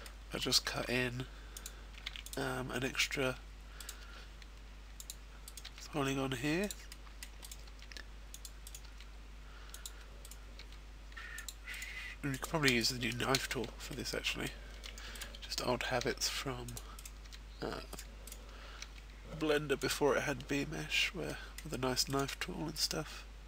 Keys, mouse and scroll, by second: 0.7 click, 1.1 ctrl+r, 1.5 click, 3.0 right click, 3.4 g, 4.4 click, 4.8 right click, 6.3 middle click, 6.9 right click, 7.3 g, 7.9 click, 8.2 right click, 8.6 g, 9.3 click, 9.8 right click, 10.4 g, 11.2 click, 11.4 right click, 12.2 click, 12.2 g, 12.6 shift+right click, 13.3 f, 13.8 middle click, 15.1 right click, 15.1 a, 16.3 g, 16.7 click, 17.0 right click, 17.3 g, 17.9 right click, 18.7 right click, 19.0 g, 19.8 click, 21.2 middle click, 22.4 g.